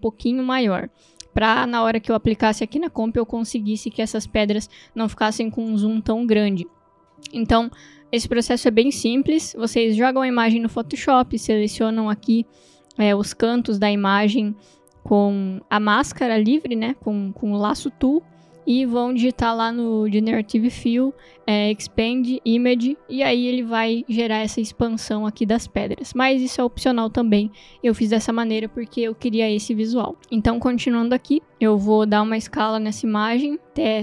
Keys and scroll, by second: 33.0 s.